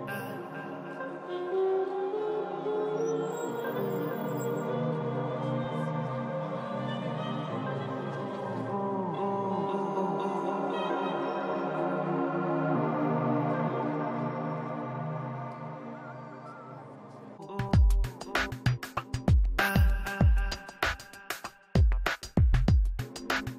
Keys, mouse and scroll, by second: 1.7 f, 2.1 click, 3.6 middle click, 4.8-6.2 drag, 5.7 middle click, 6.3 click, 7.0 ctrl+z, 7.2-8.2 middle drag, 7.6-9.9 typing, 8.9 middle click, 9.7-11.0 drag, 11.4-13.9 middle drag, 13.4 click, 14.7-15.8 middle drag, 15.2 click, 16.1-18.0 middle drag, 17.5 f, 17.7 f, 18.0 click, 19.0 middle click, 19.5 click, 20.2-21.4 middle drag, 20.9 click, 21.7 middle click, 21.9 click, 22.4 right click, 22.5 middle click, 23.0 p, 23.2 f, 23.3 f, 23.5 middle click.